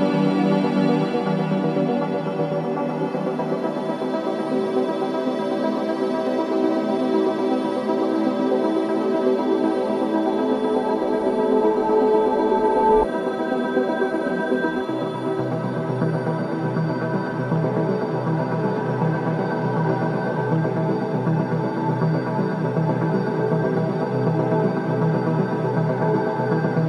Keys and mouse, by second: 3.7 typing, 4.1 click, 4.9 click, 6.7-7.1 typing, 8.5 click, 9.6-13.0 drag, 13.2 typing, 13.2-16.0 drag, 16.2-16.6 typing, 18.6-19.5 drag, 19.7-21.4 drag, 23.3 typing, 24.3-26.8 drag.